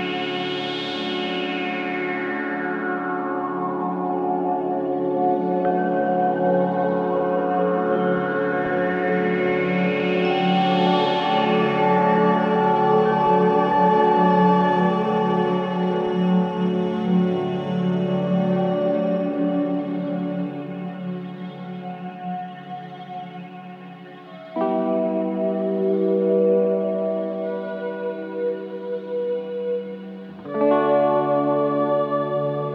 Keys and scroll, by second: 1.5 9, 1.6 Return, 2.0 0, 2.0 Return, 2.2 9, 2.4 Return, 5.6 3, 11.3 4, 17.1 Delete, 17.8 2, 22.3 4, 23.6 1, 24.7 4, 29.6 3, 29.9 ].